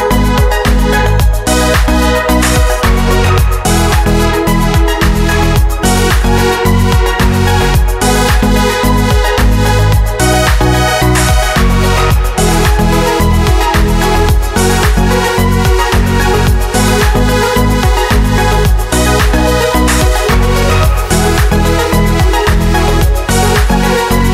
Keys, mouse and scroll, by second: 0.1 click, 1.3 click, 2.4 click, 3.5 click, 4.9 click, 7.0 click, 9.2 click, 11.6 click, 14.2 click, 17.9 alt+Tab, 18.6 click, 19.7 click, 20.6 click.